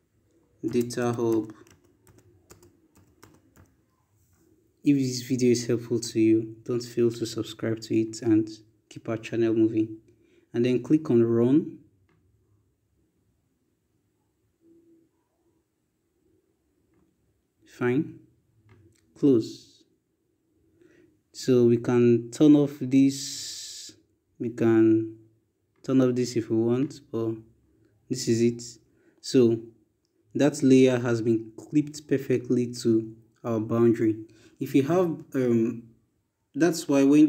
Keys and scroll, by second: 0.0-5.9 typing.